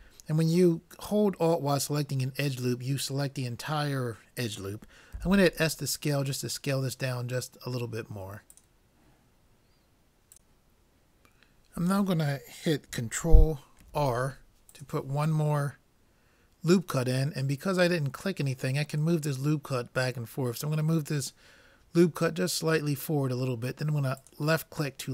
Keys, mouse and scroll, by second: 5.2 s, 13.9 ctrl+r.